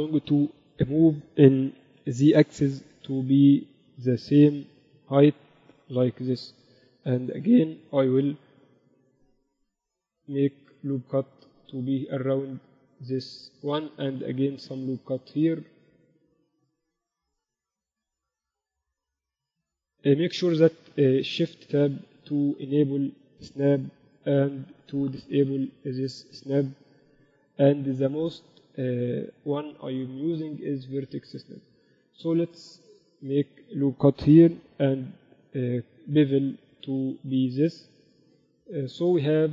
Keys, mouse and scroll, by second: 1.5-3.2 middle drag, 2.0 g, 6.0-7.3 middle drag, 9.0 ctrl+r, 14.2 ctrl+r, 17.7 a, 17.8 right click, 18.5 shift+Tab, 19.2 click, 19.2 right click, 23.1-28.3 drag, 31.2 Escape, 32.9 ctrl+r, 34.6 ctrl+b.